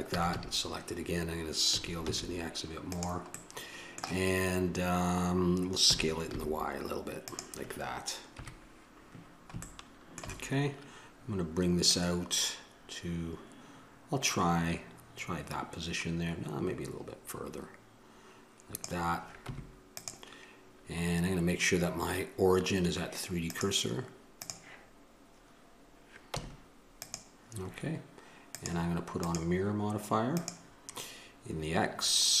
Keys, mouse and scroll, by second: 0.1 a, 0.3 a, 8.3 KP_1, 9.7 middle click, 9.9 middle click, 11.8-15.0 drag, 19.5 Tab, 24.5-26.3 drag, 26.3 Tab, 29.9-32.4 drag.